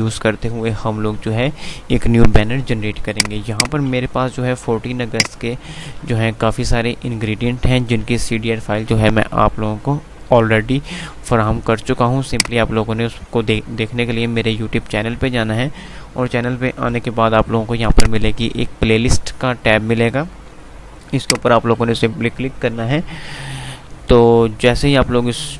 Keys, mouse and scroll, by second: 3.3 click, 4.4 F2, 5.3 click, 5.8 F2, 10.5 F5, 12.6 click, 15.8 F5, 18.1 click.